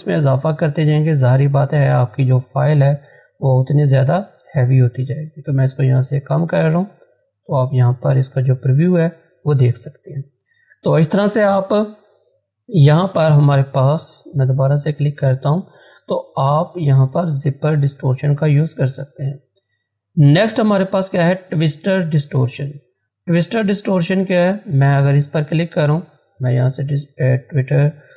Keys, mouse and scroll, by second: 3.0-7.2 drag, 7.2 scroll down 1, 10.9 click, 11.0 click, 14.1 click, 24.3 click.